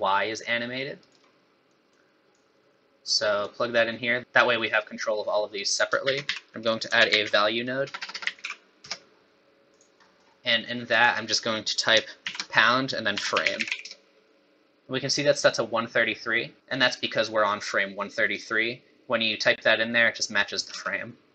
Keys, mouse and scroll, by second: 1.7 click, 2.3 click, 4.2 middle click, 5.7 click, 6.0 shift+a, 8.0 BackSpace, 8.1 BackSpace, 10.0 middle click, 10.9 click, 16.6 click, 20.7 space.